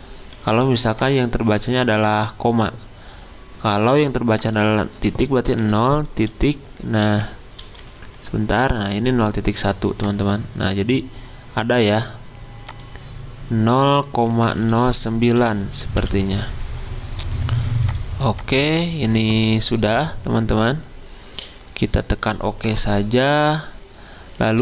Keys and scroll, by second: 0.5 1, 5.6-7.6 typing, 14.4 0, 15.4 Delete, 16.0 9.